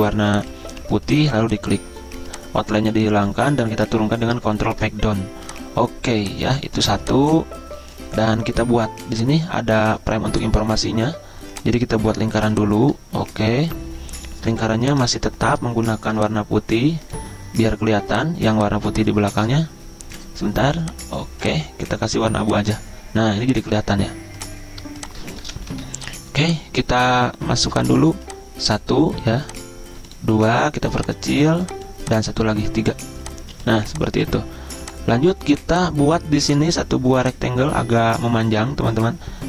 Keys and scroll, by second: 4.4 ctrl+Page_Down, 14.5 ctrl+z, 25.4 typing.